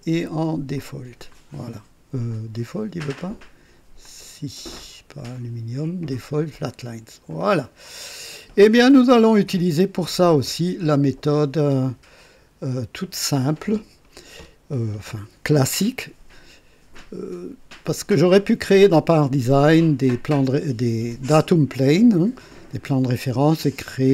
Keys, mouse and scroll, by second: 0.8 click, 1.3 click, 3.1 click, 4.1 click, 5.2 click, 7.3 click, 7.9 click, 9.5 KP_1, 10.4 KP_2, 12.2 right click.